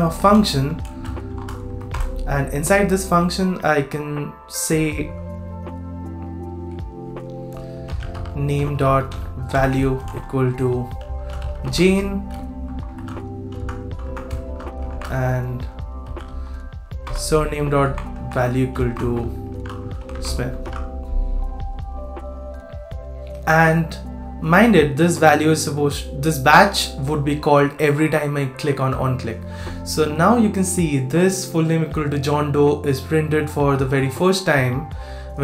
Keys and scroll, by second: 13.6 super+z, 14.0 super+Left, 20.6 super+s.